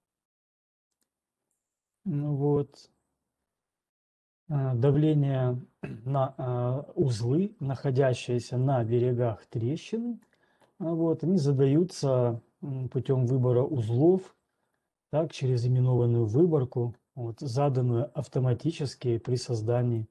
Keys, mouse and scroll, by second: 0.1 scroll, 0.8 scroll, 1.1 click, 2.1 click, 2.8 scroll, 10.1 click.